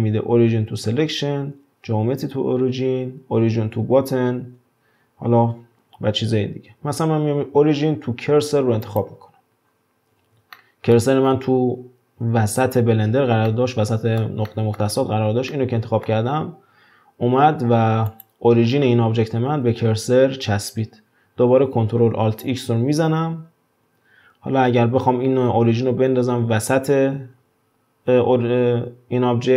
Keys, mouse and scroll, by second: 9.7 scroll down 4, 10.5-18.1 shift+middle drag, 18.1 click, 22.8 ctrl+alt+x.